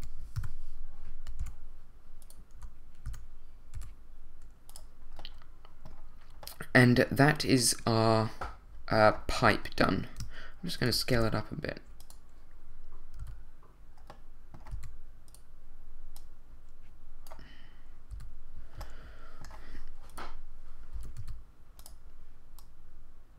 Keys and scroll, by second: 0.3 7, 1.4 2, 3.0 s, 3.7 y, 11.1 shift+s, 12.0 s, 13.2 a, 14.7 z, 18.1 z, 20.9 s, 21.2 z.